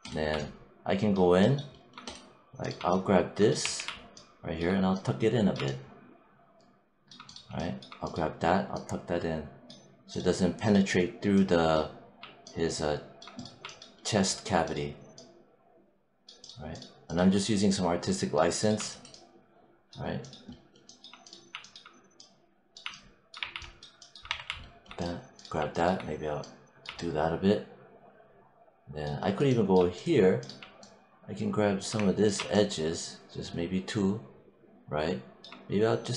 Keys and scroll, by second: 3.5 w, 23.2 3, 24.1 1.